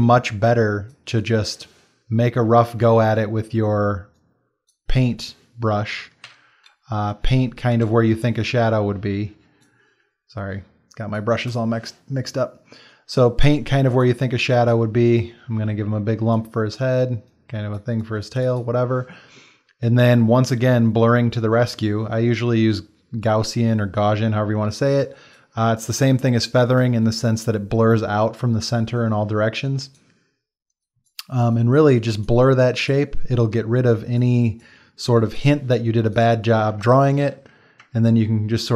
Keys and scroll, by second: 2.7 x, 6.2 b, 7.7 x, 37.2 ctrl+t.